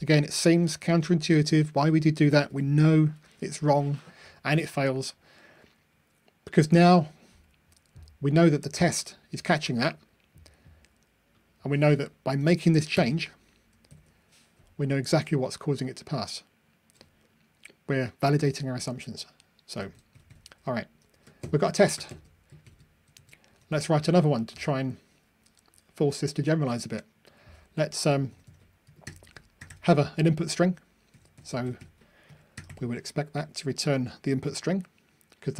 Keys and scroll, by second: 2.4 ctrl+r, 14.0 super+F9, 15.3 ctrl+r, 23.2 super+c, 23.9 super+v.